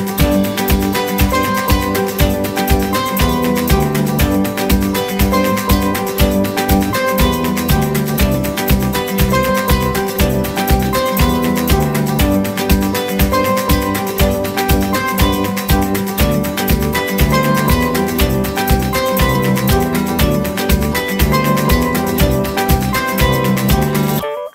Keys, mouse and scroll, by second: 1.1 middle click, 12.1 middle click, 16.4-17.1 scroll up 1, 19.7 space, 21.0 typing, 23.1-23.9 typing, 24.2 Return.